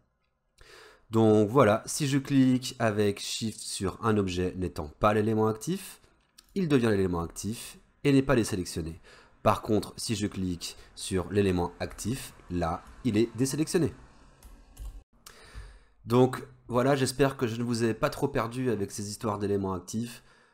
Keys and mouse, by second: 6.5 shift+click, 12.5 shift+click.